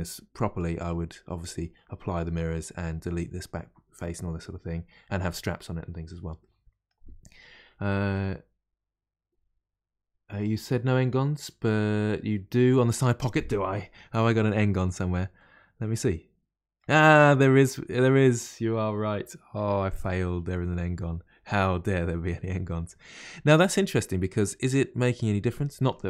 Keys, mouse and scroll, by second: 0.5-9.4 middle drag, 13.9 middle click, 14.7-15.3 scroll up 2, 15.3-18.4 middle drag, 21.9-23.5 middle drag, 23.5 Tab, 23.8-26.0 middle drag.